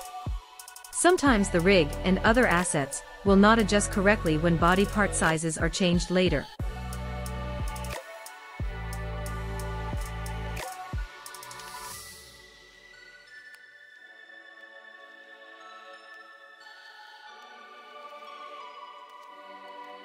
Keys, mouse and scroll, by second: 1.0 click, 2.7 click, 4.6 click, 6.2 click, 7.7 click, 9.2 click, 10.2 click, 11.6 click, 13.3 click, 15.0 click, 19.1 click.